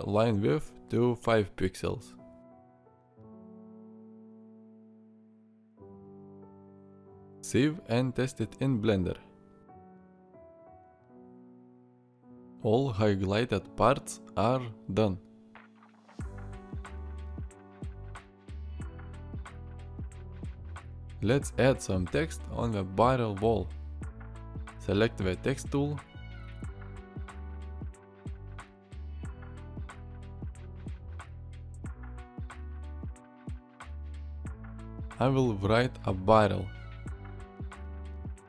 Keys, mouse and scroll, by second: 11.0 alt+r, 12.0-12.4 drag, 15.9-16.9 middle drag, 17.4-18.9 middle drag, 19.7 middle click, 20.1 shift+middle drag.